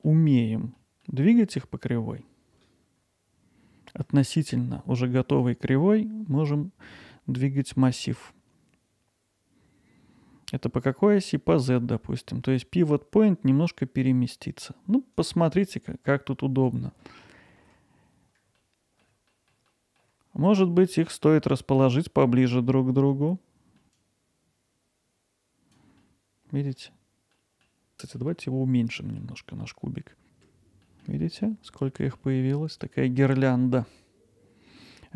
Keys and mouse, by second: 0.7 middle click, 1.4 middle click, 10.9-14.2 drag, 15.3-16.7 drag, 18.6-19.0 alt+middle drag, 19.3 middle drag, 19.7 middle click, 20.8-21.2 middle drag, 24.1-25.7 drag, 26.0-26.7 alt+middle drag, 27.3 middle click, 28.3 middle click, 28.6 middle click, 29.9 click, 30.1 middle click, 30.8 middle drag, 31.2 alt+middle drag, 32.2 middle drag, 34.8 middle click.